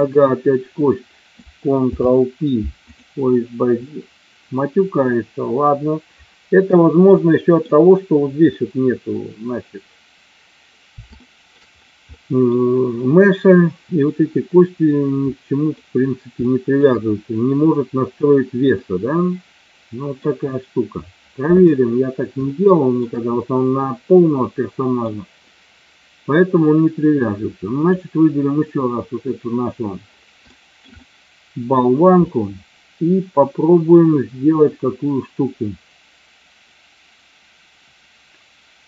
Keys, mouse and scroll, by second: 1.7 ctrl+p, 7.2-7.6 middle drag, 11.1-11.4 shift+middle drag, 12.1-12.4 middle drag, 13.7 middle click, 15.2-15.6 middle drag, 16.4 shift+middle drag, 18.7-20.2 middle drag, 22.4-23.0 shift+middle drag, 24.3-25.0 middle drag, 27.7 click, 30.5 shift+middle click, 30.8-31.7 middle drag.